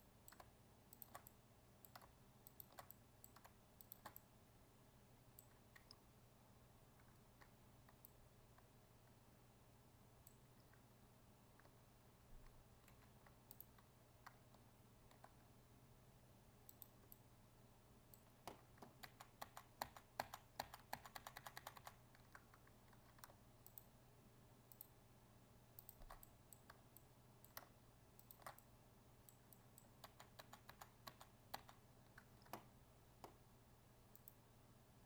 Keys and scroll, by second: 12.8 ctrl+e, 19.0 ctrl+z, 30.0 ctrl+z.